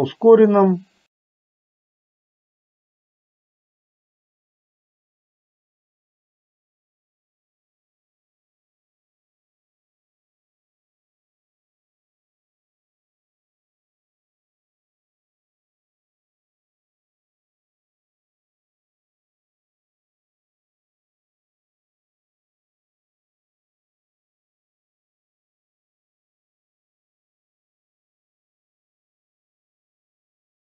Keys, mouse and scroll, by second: 1.2 a, 1.5-2.7 drag, 3.0 middle click, 3.2 click, 4.2-6.0 drag, 6.3 click, 6.9 a, 7.3 click, 8.3 middle click, 9.2 ctrl+click, 9.6 click, 10.7 click, 11.0 click, 11.5 click, 12.2 click, 13.3 a, 13.6 click, 14.4 click, 14.7 middle click, 14.9 click, 15.2 click, 15.7 a, 16.0 click, 16.6 middle click, 16.9 click, 17.4 click, 17.7 a, 18.0 click, 19.0 click, 19.4 click, 19.5 middle click, 19.8 click, 20.2 a, 20.5 click, 21.5 click, 21.7 click, 22.0 click, 22.7 a, 22.8 click, 23.7 middle click, 23.9 click, 24.2 click, 24.4 click, 24.6 click, 24.9 a, 25.2 click, 26.0 click, 26.4 middle click, 26.9 click, 27.2 a, 27.6-28.8 drag, 29.1 click, 29.5 click, 29.8 click, 30.2 a.